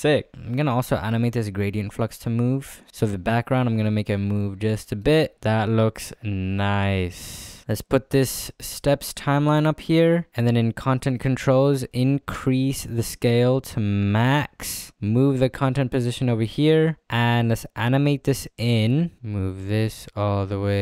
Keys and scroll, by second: 9.6 space.